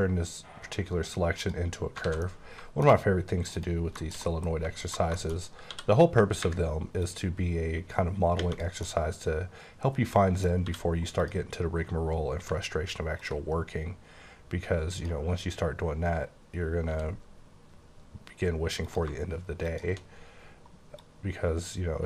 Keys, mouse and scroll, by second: 1.4 click, 1.8 scroll down 2, 2.0 alt+a, 2.2 middle click, 2.9 scroll up 2, 3.5 click, 4.0 shift+middle click, 5.3 scroll up 2, 5.7 d, 7.0 click, 8.8 middle click, 10.6 d, 11.2 click, 13.2 ctrl+click, 16.9 e, 18.8 click.